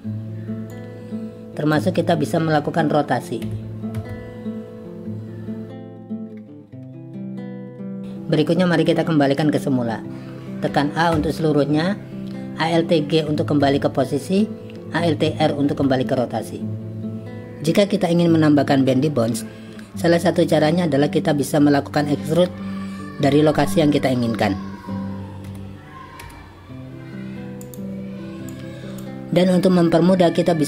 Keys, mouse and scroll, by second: 0.7-1.7 drag, 3.4 r, 4.0 z, 5.8 click, 6.0 g, 6.5 z, 7.6 click, 8.0 click, 13.6 alt+g, 15.7 alt+r, 25.5 e, 26.2 z, 27.6 click, 28.5 click.